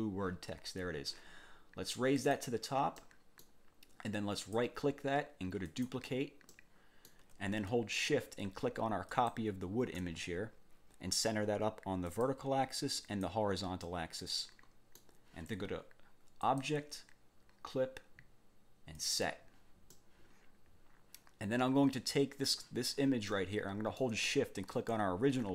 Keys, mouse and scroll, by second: 2.2 click, 3.0 middle click, 4.4 click, 5.6 click, 6.5 click, 9.1 shift+click, 12.1 click, 13.0 click, 13.8-15.2 drag, 16.4 click, 19.0 click, 19.9-22.7 middle drag, 23.3 click, 24.7 shift+click.